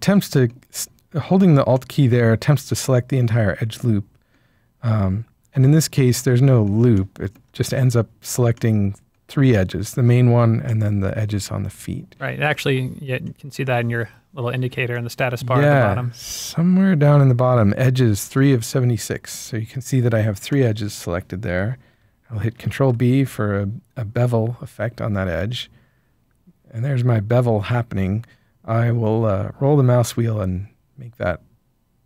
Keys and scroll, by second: 22.5 ctrl+b.